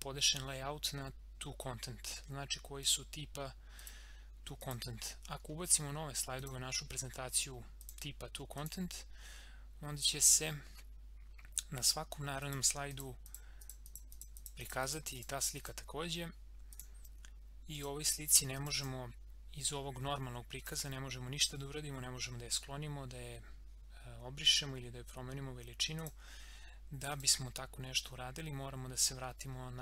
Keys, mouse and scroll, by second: 2.8 click, 5.4 scroll down 1, 6.4 click, 11.8 click, 18.1 click, 26.0 click, 28.0 scroll up 1.